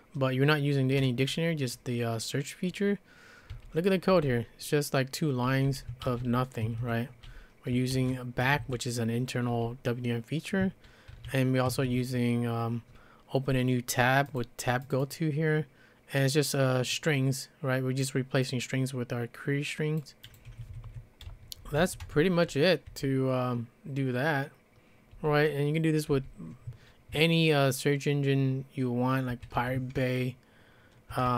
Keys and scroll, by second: 3.5-8.0 typing, 8.4 Escape, 9.5 j, 11.1 shift+v, 11.7 Escape, 20.5 Escape, 20.9 Escape, 21.4-22.9 typing, 25.1 j, 26.1 l, 29.1-30.1 typing, 31.2-31.3 typing.